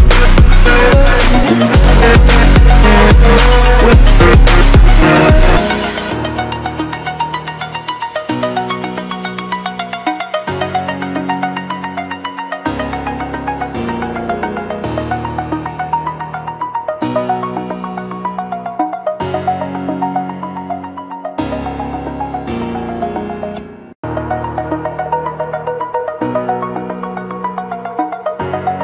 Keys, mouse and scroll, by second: 5.6 click, 9.1 scroll up 1, 10.4 click, 12.8 scroll down 1, 13.7 scroll up 1, 14.6 right click, 15.3 click, 18.2 scroll down 1, 20.3-21.0 scroll down 1, 21.0 scroll down 1, 23.0 click, 26.5 click, 28.5 click.